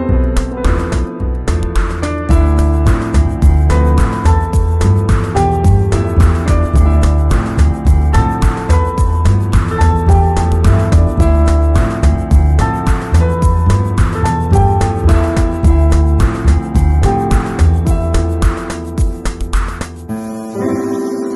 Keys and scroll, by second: 2.7 super+i, 4.6 z, 6.8 b, 8.0 [, 9.7 [, 10.4 x, 13.3 [, 17.7-21.1 typing.